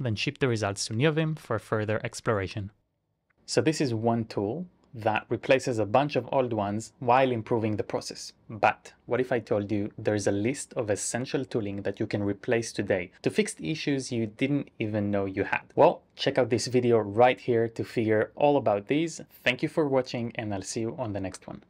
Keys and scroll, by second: 0.0-1.9 typing, 2.1 Up, 2.2 Up, 2.3 Up, 2.5 Return.